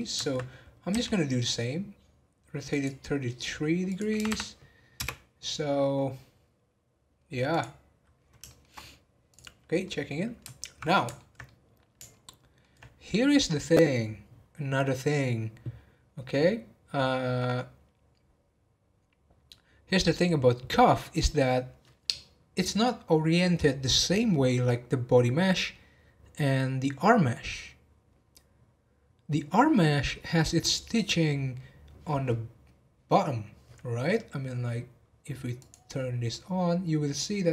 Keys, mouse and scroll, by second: 0.9 r, 3.8 click, 4.2 3, 5.4 scroll up 1, 7.4 click, 8.4 shift+middle click, 9.2 click, 9.8-14.5 middle drag, 35.6 click, 36.3-37.5 middle drag.